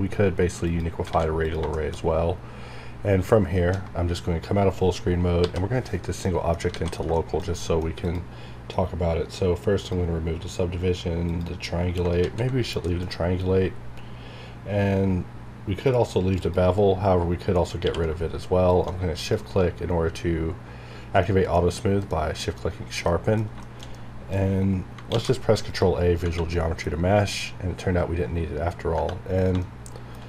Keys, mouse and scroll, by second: 0.6 click, 1.1 alt+a, 1.4 click, 1.7 shift+middle click, 2.0 scroll up 1, 5.8 scroll up 1, 6.2 middle click, 6.7 alt+a, 7.0 scroll down 1, 7.1 shift+middle click, 7.6 middle click, 8.0 click, 12.2 z, 12.8 middle click, 13.1 scroll up 1, 15.5 scroll down 1, 16.4 scroll down 1, 16.4 click, 17.8 q, 18.7 shift+click, 19.2 click, 21.2 middle click, 22.0 KP_Decimal, 22.4 middle click, 23.0 middle click, 23.9 middle click, 25.1 ctrl+a, 25.7 click, 26.2 Tab, 26.5 middle click, 27.6 scroll up 1, 28.2 scroll down 1, 28.9 Tab, 29.6 shift+middle click.